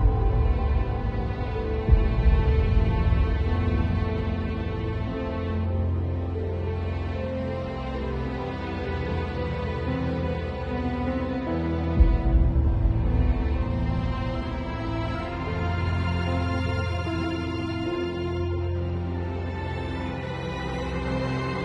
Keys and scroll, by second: 5.3 v, 6.8 super+l.